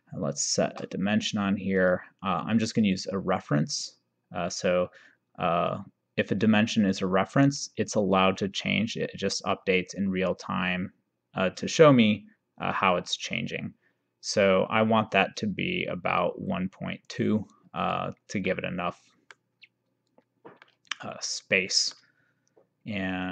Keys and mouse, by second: 1.9 click, 8.7 click, 18.5 middle click, 20.7 middle click.